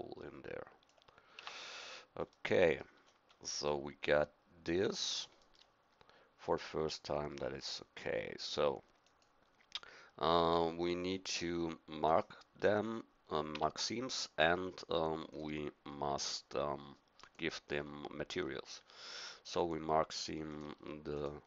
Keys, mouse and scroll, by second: 0.9 click, 1.4 Tab, 12.0-13.5 drag, 13.5 Tab.